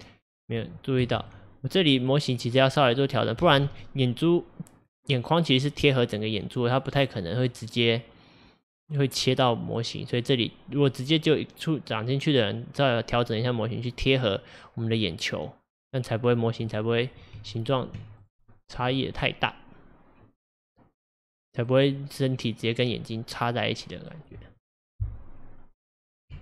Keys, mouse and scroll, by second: 1.1 alt+z, 1.3-3.5 middle drag, 3.5 alt+z, 3.9-8.2 middle drag, 9.8-12.8 middle drag, 13.2-16.2 middle drag, 16.7 click, 17.4 Tab, 18.2 click, 19.0-22.0 middle drag, 23.8-26.4 middle drag.